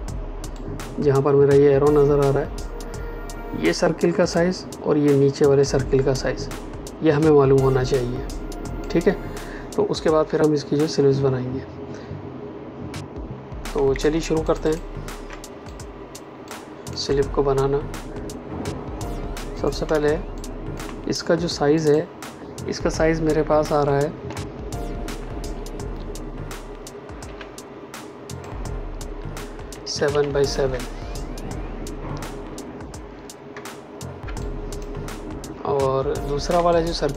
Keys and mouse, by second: 13.7 space, 14.4 ctrl+alt+click, 15.6 click, 19.5 click, 19.8 space, 20.3 click, 21.7 click, 27.2 l, 28.2 click, 29.7 KP_7, 29.9 Tab, 30.0 KP_7, 30.5 KP_Enter, 34.3 click, 34.6 space, 36.6 click, 37.0 space.